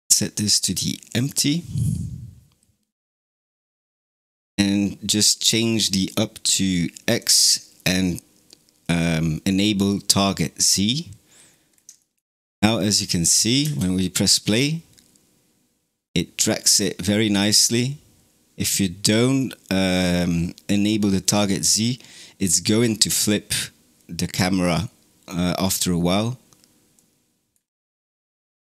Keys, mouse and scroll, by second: 4.2-7.1 scroll down 3, 7.1 click, 9.6 click, 11.4-11.9 scroll down 3, 11.9-12.7 shift+middle drag, 12.7 scroll up 1, 13.0-13.5 shift+middle drag, 13.5 space, 21.1 click, 26.8-27.5 middle drag, 27.5 scroll up 2.